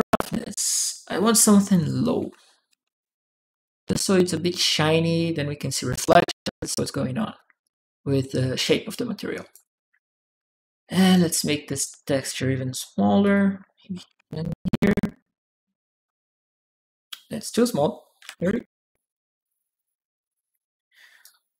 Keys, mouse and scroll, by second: 0.5 click, 4.2-5.7 drag, 6.5 click, 7.4 click, 8.7 click, 8.7 right click, 10.2 right click, 10.5 right click, 10.9 right click, 11.3 right click, 11.6 right click, 12.2 click, 13.0 click, 21.0-21.5 drag.